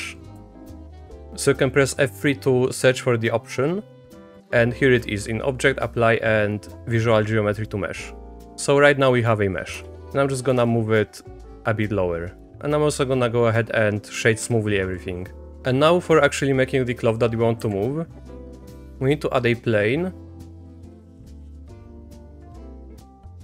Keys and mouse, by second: 0.0 p, 8.4 Tab, 8.5 a, 9.0 click, 9.7 Tab, 9.9 Tab, 9.9 click, 9.9 a, 10.6 Tab, 11.0-14.2 drag, 12.6 Tab, 12.6 a, 14.4 Tab, 17.6 KP_3, 18.6 shift+a, 22.2 r.